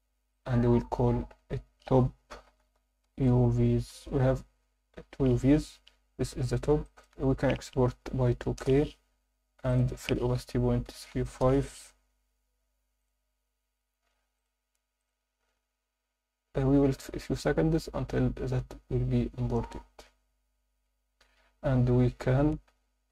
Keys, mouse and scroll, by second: 20.4-21.8 scroll down 1.